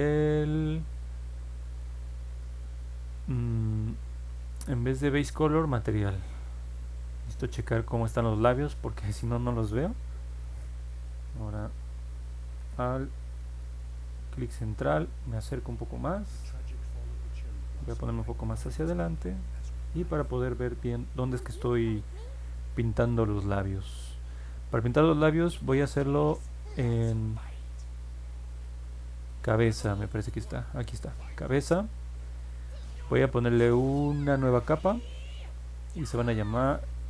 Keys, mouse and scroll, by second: 13.3-14.4 alt+middle drag, 17.7 middle click, 18.2 middle click, 19.1 middle click, 25.5-30.2 drag, 36.0 click.